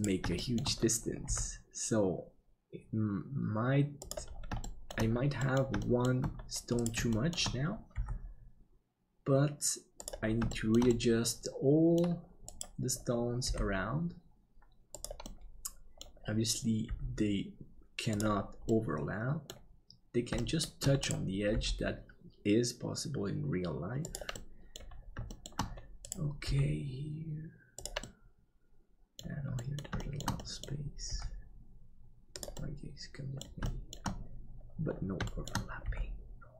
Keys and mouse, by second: 0.3 middle click, 1.2 g, 4.6 shift+middle click, 5.5 middle click, 5.8 shift+middle click, 6.8 right click, 7.1 shift+middle click, 7.9 g, 10.5-11.9 middle drag, 12.5 right click, 13.4 g, 15.3 middle click, 16.8 g, 18.7 middle click, 20.4 shift+middle click, 21.5 g, 24.3 middle click, 25.3 shift+middle click, 26.4 g, 28.1-29.2 middle drag, 29.6 middle click, 30.1 shift+middle click, 30.4 middle click, 31.1 g, 32.5 middle click, 33.7 shift+middle click, 35.3 shift+middle click, 35.8 g.